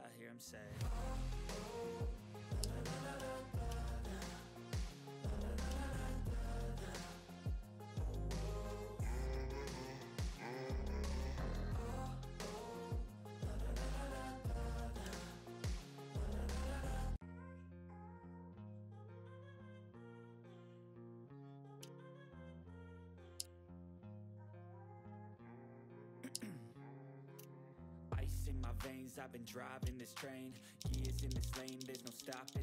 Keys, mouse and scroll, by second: 3.1-4.1 scroll down 3, 3.3 ctrl+middle click, 4.5 click, 5.8 ctrl+scroll up 1, 6.9 click, 7.8 right click, 8.9 click, 10.1 typing, 10.9 click, 12.2 right click, 13.1 click, 14.6 click, 15.3 ctrl+middle click, 15.4-15.7 ctrl+scroll down 1, 15.9-20.5 drag, 15.9 typing, 17.1 typing, 20.5-21.8 drag, 21.8-22.3 ctrl+scroll up 1, 22.5 ctrl+middle click, 22.9 click, 25.1 click, 26.8 click, 27.4 shift+click, 30.7 ctrl+z.